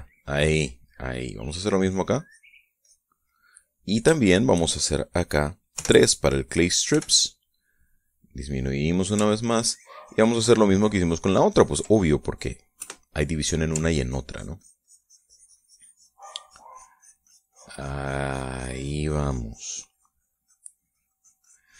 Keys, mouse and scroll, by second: 0.3-1.8 middle drag, 2.2 click, 2.7 click, 3.3 click, 3.7 middle click, 4.7 shift+middle click, 6.2 3, 7.4 f, 9.0 click, 9.8-12.4 ctrl+drag, 12.4 ctrl+middle click, 13.2 KP_Add, 14.4-21.7 ctrl+drag.